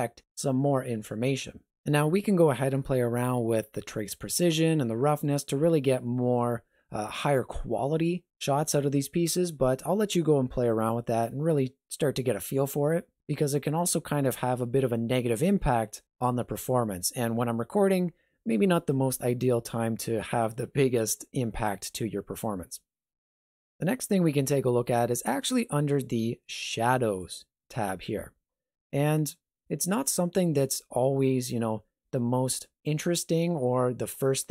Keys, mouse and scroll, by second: 23.3 click, 27.2 click.